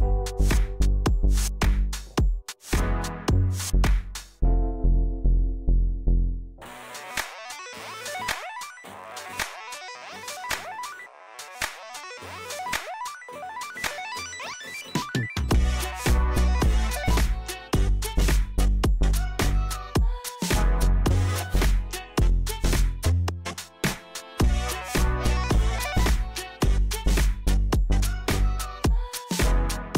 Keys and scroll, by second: 2.8 KP_7, 3.2 shift+z, 4.6 Tab, 6.0 Tab, 7.2 a, 8.5 shift+z, 12.1 e, 15.1 ctrl+KP_3, 15.6 shift+z, 18.9 e, 20.1 s, 22.1 a, 22.4 shift+z, 28.4 KP_7, 29.6 s.